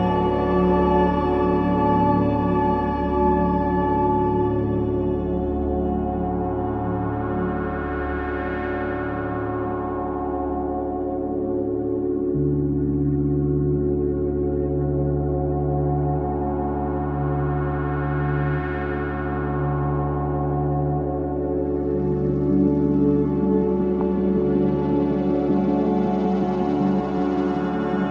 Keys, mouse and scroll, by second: 16.6 click, 17.1-17.7 typing, 18.1-28.1 drag.